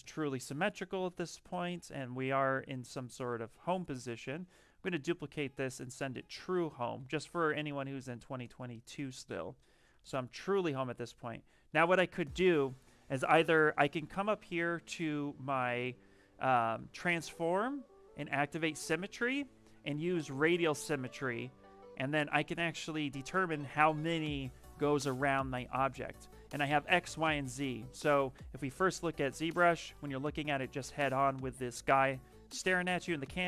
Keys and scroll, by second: 1.9-2.7 typing, 4.9 ctrl+shift+d, 5.2 w, 6.8 f, 8.0 q, 10.2 shift+f, 11.0 shift+f.